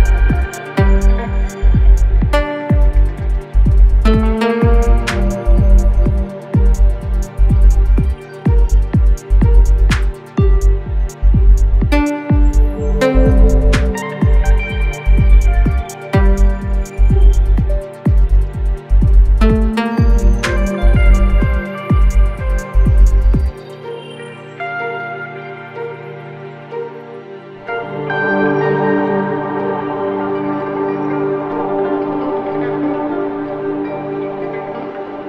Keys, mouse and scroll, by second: 2.4 click, 2.4 typing, 4.3 click, 6.6 click, 12.4 click, 13.7 typing, 17.8-19.0 drag, 21.3 ctrl+space, 21.4 ctrl+click, 21.7 ctrl+space, 22.8 click, 23.0 space, 24.6 click, 26.5 click.